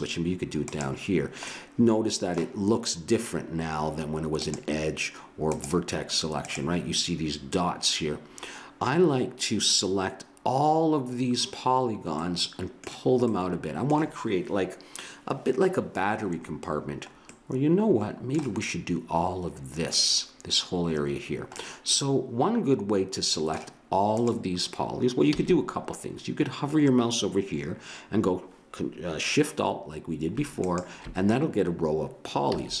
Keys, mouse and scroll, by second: 1.5 middle click, 2.1 click, 2.7-3.8 middle drag, 4.4-8.2 drag, 12.2-15.2 middle drag, 17.4-19.4 middle drag, 21.6-22.8 middle drag, 24.1-26.0 drag, 25.3 a, 30.6-32.4 drag, 32.5 a.